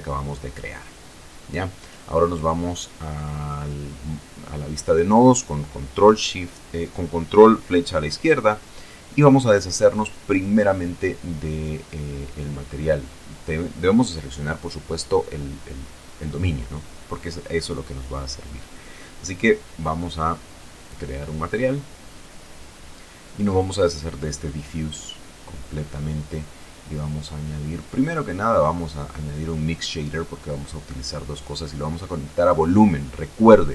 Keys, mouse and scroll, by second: 0.4 ctrl+Left, 3.0-3.8 scroll down 2, 4.3 right click, 6.2 click, 7.6 click, 10.1-10.7 scroll down 2, 11.2 scroll up 2, 12.1 right click, 12.6-13.0 scroll down 2, 13.1 middle click, 13.5-14.1 scroll down 2, 14.6 middle click, 15.1-16.7 middle drag, 18.0-18.5 scroll down 2, 18.7 scroll up 2, 19.6 shift+a, 22.4 click, 23.1 click, 25.4 right click, 26.7 shift+a, 29.9 click, 30.8 click, 31.8-33.1 drag, 33.4-33.7 middle drag.